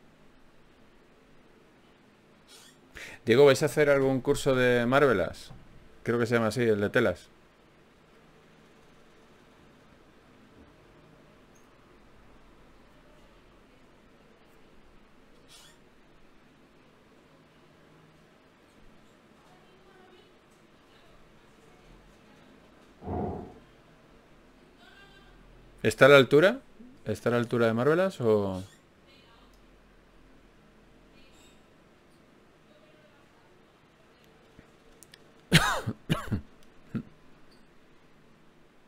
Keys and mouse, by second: 1.4-2.6 right drag, 2.0 f, 2.6 ctrl+Tab, 3.2 click, 3.2 right click, 5.1 f, 5.3 f, 5.7 f, 17.3 f, 19.3 f, 20.7 click, 21.5 f, 24.3 click, 25.7 f.